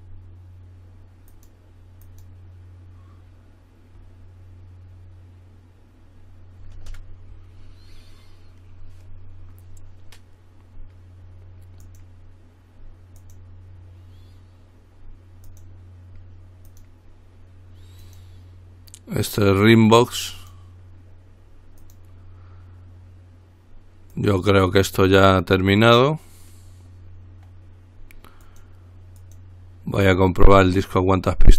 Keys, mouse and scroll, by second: 1.5 click, 2.2 click, 12.0 click, 13.4 click, 15.7 click, 16.9 click, 18.2 click, 20.6 click, 22.0 click, 24.3 click, 28.7 click, 29.4 click, 30.9 click.